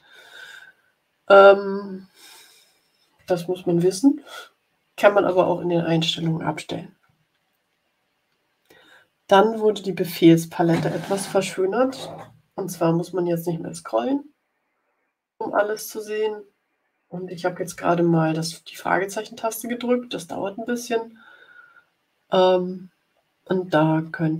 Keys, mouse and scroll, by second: 22.7-24.3 scroll down 16.